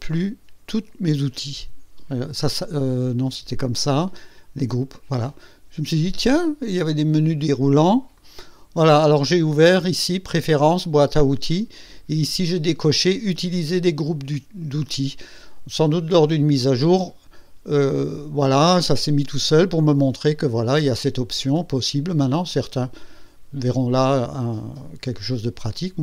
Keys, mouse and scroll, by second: 2.0 click, 3.0 click, 4.5 click, 7.3 click, 8.1 click.